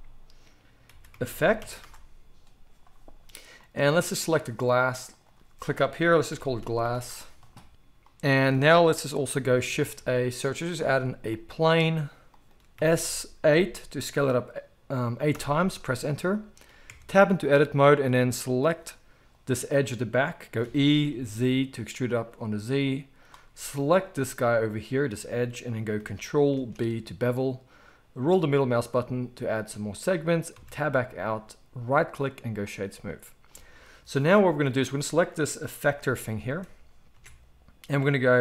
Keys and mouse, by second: 1.2 f, 4.3 middle click, 5.1 click, 5.1 middle click, 5.2-19.4 drag, 6.8 s, 9.8 shift+a, 12.7 s, 16.9 Tab, 19.4-31.9 middle drag, 20.6 e, 26.5 ctrl+b, 30.5 Tab, 31.9-34.7 right drag, 34.7 middle click, 34.8-38.4 right drag, 35.9 h, 37.2 ctrl+z.